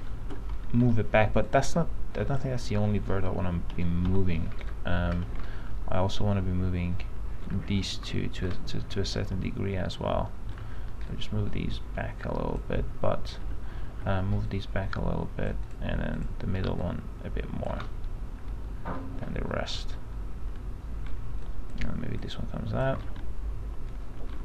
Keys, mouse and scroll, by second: 1.0 ctrl+F3, 1.6-3.4 drag, 3.9 F3, 4.2 p, 4.8 middle click, 5.4 scroll down 1, 5.6-7.9 alt+middle drag, 7.9 scroll up 1, 8.3 alt+middle click, 8.6-9.1 scroll down 1, 9.1-11.3 alt+middle drag, 11.3-13.6 drag, 14.0 ctrl+z, 14.6-18.0 drag, 18.0-21.6 alt+middle drag, 21.6-23.1 drag, 23.5 alt+middle click.